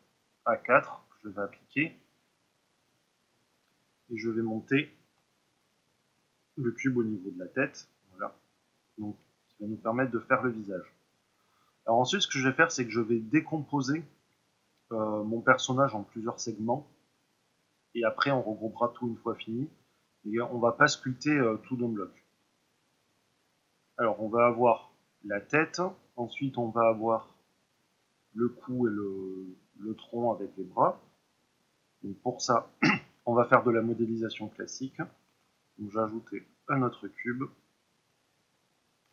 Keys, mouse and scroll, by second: 1.1-8.3 drag, 5.5 KP_3, 8.3-39.1 ctrl+middle drag, 35.2 shift+a.